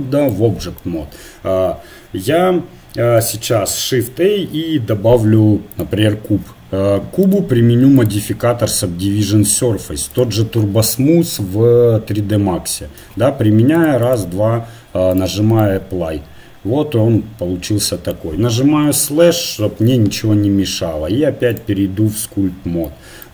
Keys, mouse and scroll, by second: 0.0 click, 3.6 shift+a, 8.0-9.8 drag, 11.4-14.1 middle drag, 14.1-15.2 drag, 15.6 middle click, 15.9 click, 16.2-17.3 middle drag, 18.9 KP_Divide, 22.3 click.